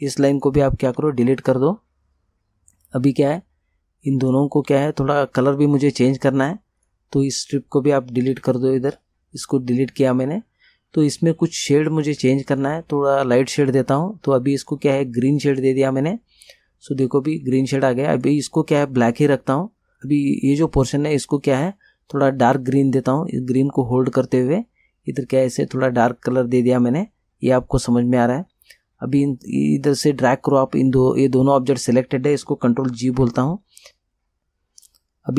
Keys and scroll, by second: 1.0 Delete, 8.4 Delete, 33.2 ctrl+g.